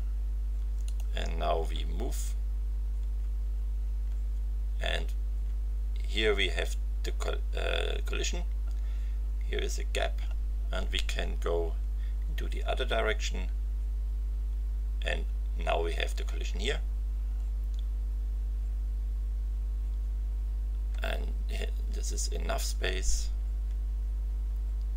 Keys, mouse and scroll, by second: 0.8 click, 3.0 t, 3.8 t, 5.2 t, 12.4 v, 20.0 z, 21.6 z, 22.5 z.